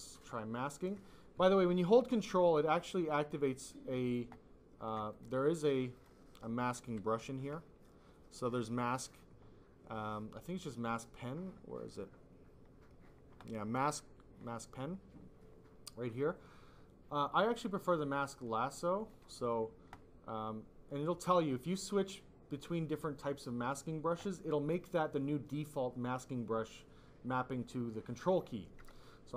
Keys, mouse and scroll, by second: 4.0 ctrl+click, 5.0 click, 5.9 click, 6.7 m, 18.9 click, 19.9 click.